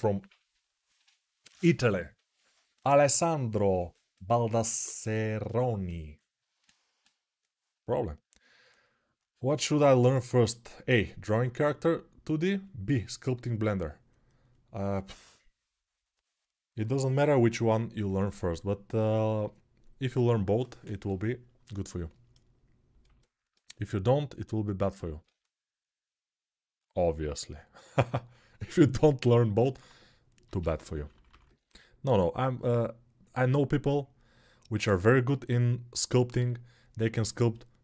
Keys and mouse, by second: 29.4 alt+q, 30.2 g, 30.8 ], 30.9 ].